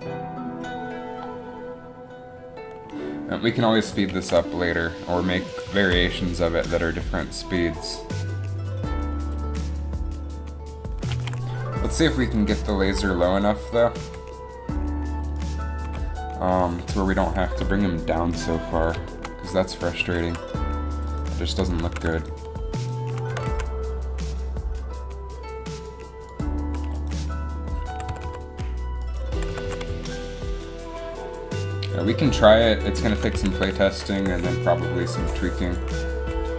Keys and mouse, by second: 4.3 alt+a, 5.9 alt+a, 11.3 alt+a, 13.1 Down, 14.1 Down, 15.5 Down, 16.0 Down, 16.9 KP_3, 17.0 KP_3, 20.1 g, 21.7 z, 22.0 z, 23.4 g, 26.6-28.0 drag, 28.0 r, 29.4 r, 33.5 a, 33.7 a, 34.3 u, 35.3 i.